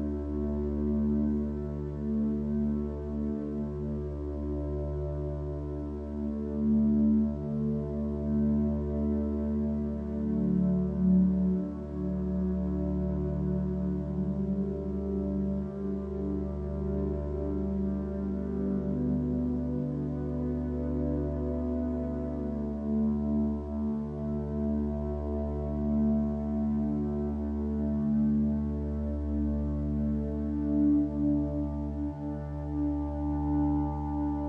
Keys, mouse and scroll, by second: 2.1 ctrl+z, 5.9 click, 7.2 click, 13.3 ctrl+space, 16.1 x, 20.2 ctrl+space, 30.3 ctrl+z, 31.0 ctrl+z, 33.5 ctrl+space.